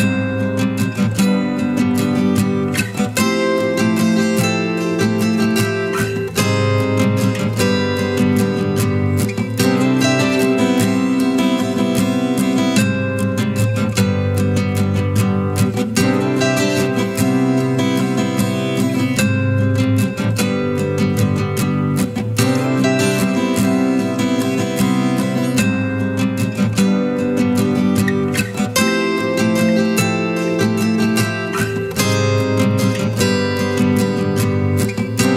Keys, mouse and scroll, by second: 2.5 Return, 3.5 Up, 5.1 Left, 6.4 Left, 8.7 ctrl+=, 22.1-32.1 scroll down 1, 32.1 scroll down 1, 32.1-32.8 scroll up 1.